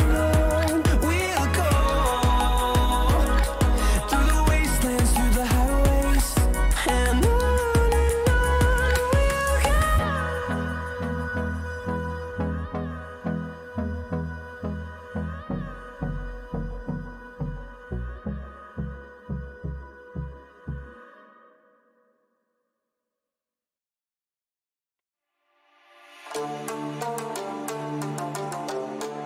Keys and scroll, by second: 1.4 ctrl+=, 3.2 ctrl+=, 10.2 Right, 11.0 Right, 14.0 t.